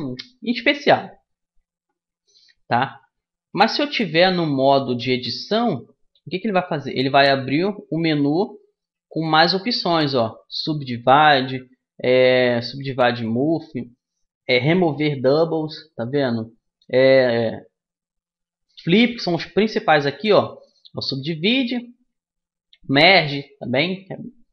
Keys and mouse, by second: 3.5 a, 4.5 Tab, 6.9 w.